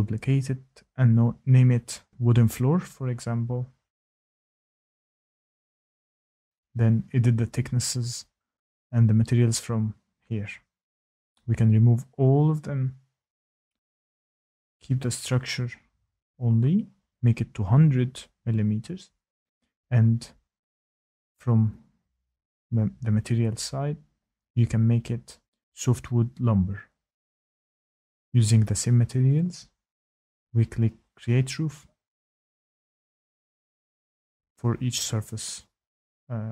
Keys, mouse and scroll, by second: 0.3 click, 1.8-2.6 typing, 3.8-4.6 typing, 5.6 typing, 7.0 click, 9.6 click, 11.5 click, 12.8 click, 13.2 click, 14.2 click, 14.9 click, 15.9 click, 16.6 click, 17.4 click, 19.2 click, 19.5-19.8 typing, 20.8 click, 23.1 click, 24.1 click, 25.5 click, 25.5-27.9 typing, 33.0 click, 33.2 click, 35.3 click, 35.7 click.